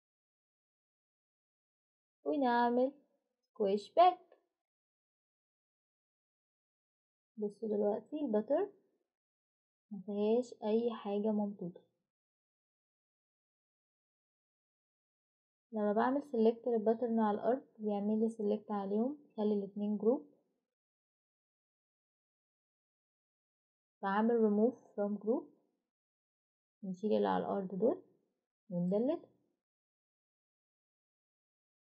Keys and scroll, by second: 1.0-2.9 typing, 30.9 Delete.